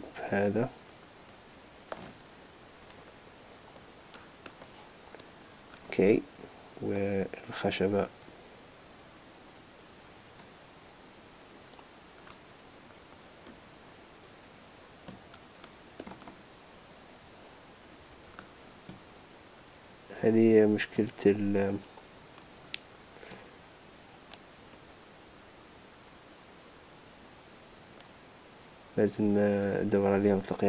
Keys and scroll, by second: 3.3 shift+h, 18.1 super+z.